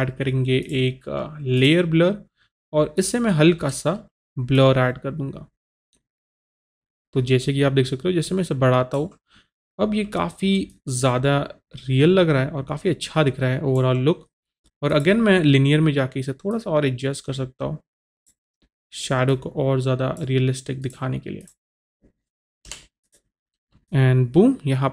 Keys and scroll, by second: 22.8 Return.